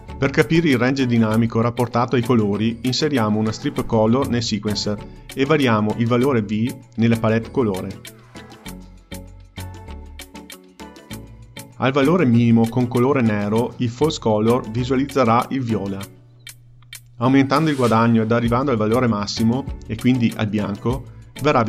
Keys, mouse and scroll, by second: 2.7 shift+a, 6.5 click, 7.9 click.